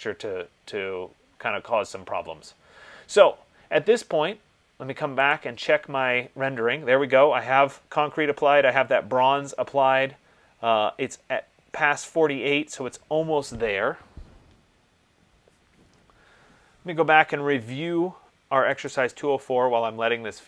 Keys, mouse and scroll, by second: 5.5 click, 19.1 click.